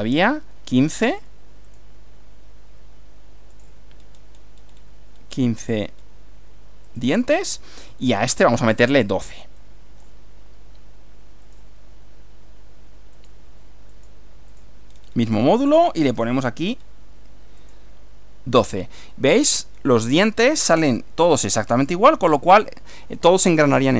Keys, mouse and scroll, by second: 1.1 click, 1.6 click, 3.5 click, 4.0-4.5 scroll down 1, 5.2-5.8 scroll down 2, 6.0 scroll down 2, 6.9 click, 8.1 click, 9.6-10.2 drag, 11.4 click, 13.2 click, 13.9 click, 14.5 click, 15.0-15.4 scroll down 2, 15.6-16.1 scroll down 2, 16.8 scroll down 1, 17.6 click, 23.0-23.9 shift+middle drag.